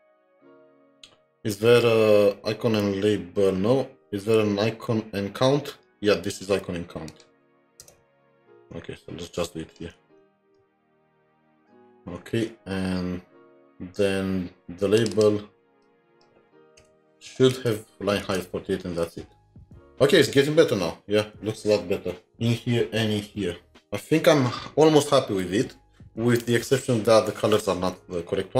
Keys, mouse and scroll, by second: 0.4-1.3 scroll down 1, 7.8 scroll down 1, 7.8 Return, 8.2 typing, 10.0 shift+Tab, 10.5 typing, 15.1 typing, 15.8 double click, 15.8 double click, 16.8 Delete, 17.6 ctrl+s, 18.3 alt+Tab.